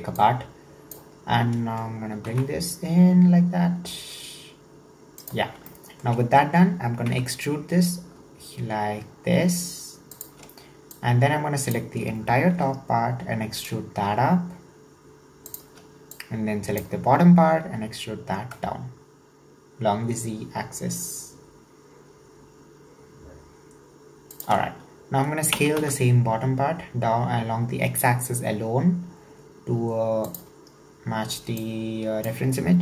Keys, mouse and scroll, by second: 0.2 click, 1.2-2.2 scroll up 2, 2.2 g, 5.7-7.1 shift+middle drag, 7.1 e, 11.0 click, 12.5 e, 16.2 drag, 17.6 e, 24.6-25.6 scroll up 1, 25.6 s, 31.6 click.